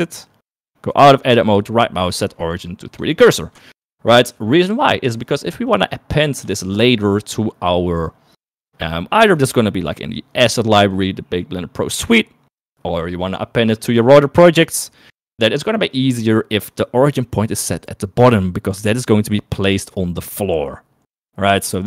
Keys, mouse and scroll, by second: 0.7 Tab, 1.4-3.3 right drag, 3.8 shift+middle click, 4.9 KP_1, 5.4 KP_3, 6.7 shift+middle click.